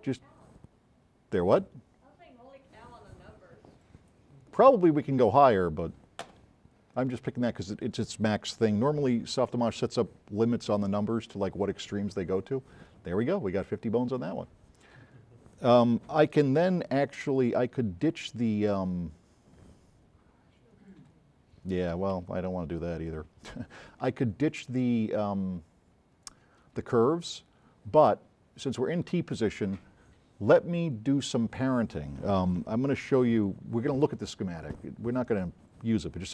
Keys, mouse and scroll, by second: 3.9 click, 15.1 scroll up 2, 17.1 s, 17.3 right click, 27.4-28.7 right drag, 31.0 scroll up 2.